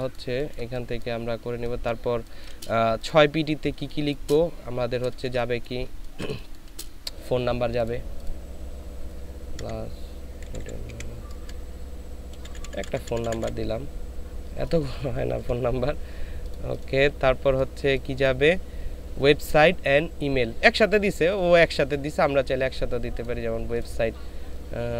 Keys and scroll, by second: 5.1 ctrl+space, 5.8 ctrl+space, 9.6 KP_Add, 10.4 KP_8, 10.6 KP_8, 10.8 KP_Subtract, 12.3-13.4 typing, 14.9 BackSpace, 15.0 BackSpace, 15.3 BackSpace.